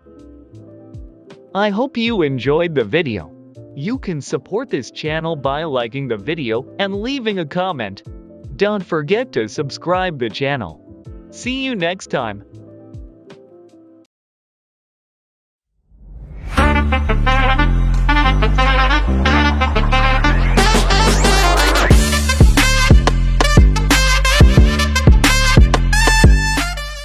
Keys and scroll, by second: 7.7 ctrl+BackSpace, 7.8 ctrl+BackSpace.